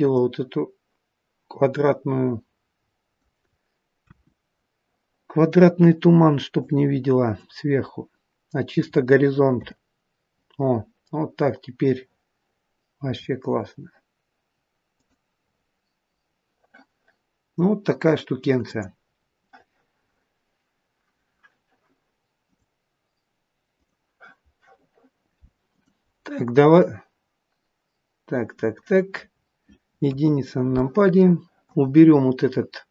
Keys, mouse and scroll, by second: 0.0 click, 4.0 KP_1, 5.7 click, 7.2 click, 9.5 KP_0, 13.0 r, 18.6 click, 25.6 click, 29.4 scroll down 1, 30.0 scroll down 4, 30.1 KP_1, 30.7 middle click, 31.7 click.